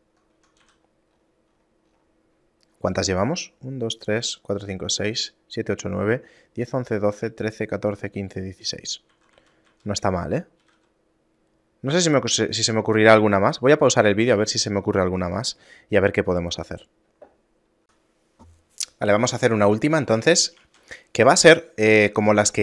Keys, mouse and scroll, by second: 0.5 Tab, 0.8 a, 1.0 middle click, 1.2 scroll down 1, 2.4 middle click, 2.8 scroll down 1, 9.2 a, 9.5 a, 9.8 a, 10.8 g, 13.2 scroll up 6, 14.0 middle click, 14.0 scroll up 3, 14.6 scroll up 1, 15.2 middle click, 17.8 Tab, 17.8 x, 20.6 shift+a.